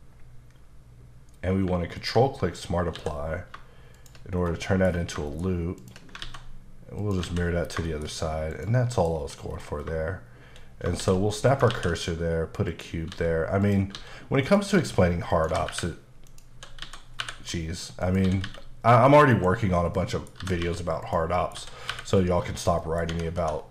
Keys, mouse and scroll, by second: 2.0 ctrl+click, 3.0 s, 4.0 shift+click, 4.3-5.2 scroll down 5, 4.7 middle click, 5.3 shift+middle click, 5.8 shift+click, 6.2 alt+x, 7.0 click, 7.3 alt+a, 7.5 scroll down 2, 7.9 shift+middle click, 8.5 click, 8.9 middle click, 9.1-9.9 scroll up 6, 11.0 shift+s, 11.5 click, 11.7 shift+a, 12.7 click, 13.1 s, 13.6 click, 14.0 s, 14.5 click, 14.8 s, 15.3 click, 15.5 g, 16.3 click, 16.8-17.2 typing, 18.0 click, 18.3-19.3 typing, 19.0 click, 19.7 scroll down 2, 20.0 middle click, 20.4-21.6 typing, 21.0 click, 21.4 middle click, 22.5 click, 22.8 middle click, 23.1 Tab, 23.4 2.